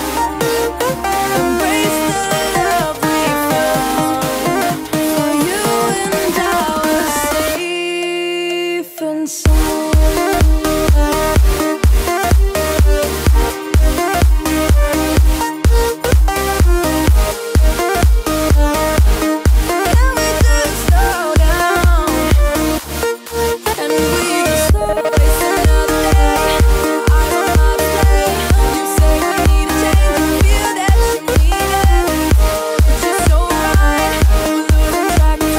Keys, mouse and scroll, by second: 0.0-2.2 typing, 2.5 ctrl+a, 3.5 click, 6.7 click, 7.5 m, 8.5-12.0 drag, 12.0 i, 13.2 click, 13.8 v, 14.1 right click, 14.8 click, 16.7 right click, 18.2-22.4 drag, 22.4 Left, 24.4-24.9 alt+scroll up 1, 25.0 click, 26.9 ctrl+z, 27.4-31.7 drag, 31.7 Left, 33.9 shift+click, 34.6-34.9 alt+scroll down 1, 35.3-35.5 drag.